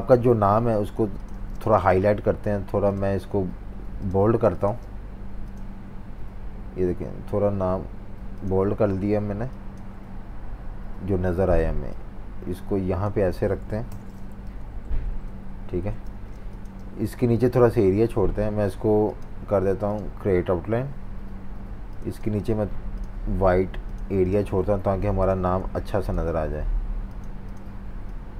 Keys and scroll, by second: 0.0-1.3 typing, 4.2 v, 14.4 shift+super+v, 16.5 Left, 16.6 typing, 25.5 super+3.